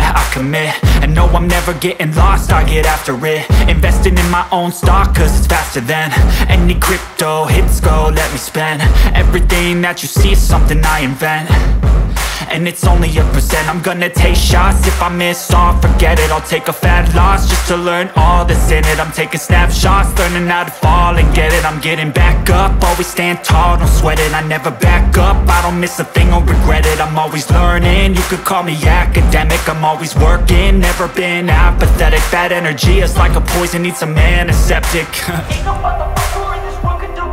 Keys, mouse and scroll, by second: 0.1 ctrl+super+z, 0.7 ctrl+super+z, 1.2 ctrl+super+z, 1.8 ctrl+super+z, 3.3 ctrl+super+z, 3.7 ctrl+super+z, 5.2 ctrl+super+z, 5.7 ctrl+super+z, 7.4 ctrl+super+z, 8.6 ctrl+super+z, 9.6 ctrl+super+z, 19.3 ctrl+super+z.